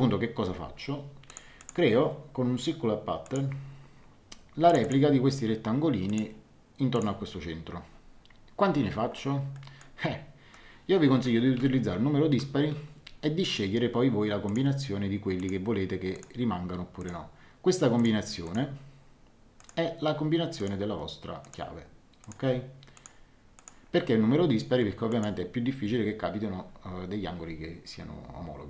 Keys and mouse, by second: 0.4 Escape, 1.2 click, 3.2 click, 4.6 click, 6.0 click, 9.5 middle click, 11.4 KP_2, 11.6 KP_7, 14.4 click, 19.5 click, 25.1 click.